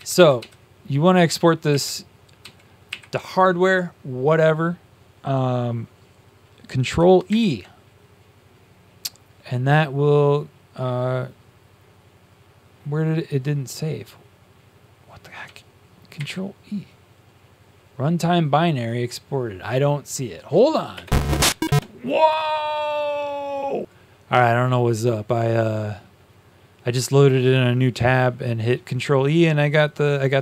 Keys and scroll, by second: 0.1 Down, 1.6 Down, 2.3 Down, 7.2 Up, 7.2 ctrl+e, 16.1 ctrl+e, 23.8 ctrl+e.